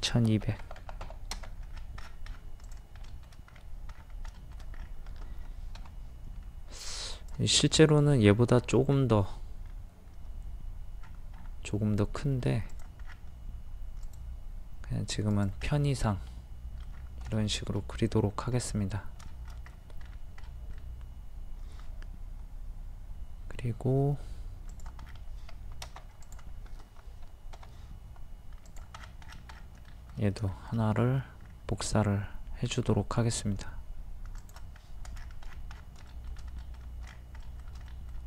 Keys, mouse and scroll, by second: 0.3 KP_2, 1.7 scroll down 1, 2.7 click, 3.1 shift+middle click, 3.5-3.9 scroll up 1, 3.9-4.3 scroll down 1, 4.4 shift+middle click, 4.6 scroll down 1, 4.8 scroll up 1, 5.8-6.1 scroll up 1, 6.5 scroll up 1, 7.1 click, 12.6 scroll up 1, 12.7 click, 13.1-13.7 scroll down 1, 14.1-15.1 drag, 15.7 middle click, 17.0-17.3 scroll down 1, 17.3 shift+middle click, 18.4 scroll up 1, 18.6-18.9 scroll down 1, 18.9 scroll up 1, 19.2 shift+middle click, 19.7-20.1 scroll up 1, 20.4 middle click, 25.0 scroll down 1, 25.2-25.5 scroll up 1, 25.5 Escape, 26.2 click, 27.6 m, 28.7 ctrl+click, 29.0-29.7 scroll down 1, 29.8 shift+middle click, 30.5 shift+middle click, 35.0 scroll up 1, 35.2-36.0 scroll down 1, 36.0 scroll up 1, 36.1 middle click, 37.1 scroll up 1, 37.5 middle click, 37.8 scroll up 1.